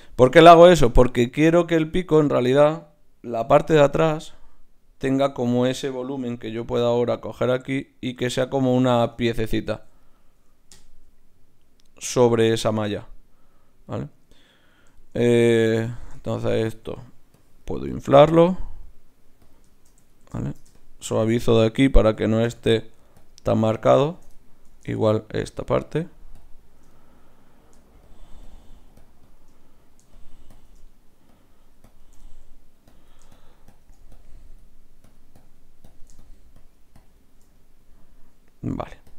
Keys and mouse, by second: 4.0-6.6 drag, 6.6 ctrl+r, 9.7 ctrl+z, 10.7 KP_Divide, 15.7 Tab, 17.3-22.1 drag, 20.1 middle click, 20.1 right click, 22.1 ctrl+z, 22.6-39.1 drag, 24.3-30.9 middle drag, 24.3 right click, 25.6-29.6 right drag, 37.5-39.1 middle drag, 37.5-39.1 right drag.